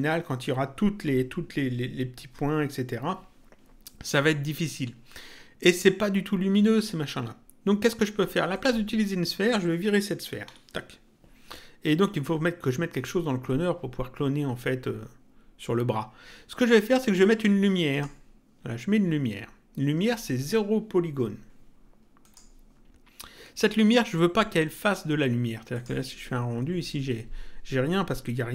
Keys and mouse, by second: 8.5 click, 10.4 Delete, 17.9 click, 22.2 click, 25.7 click.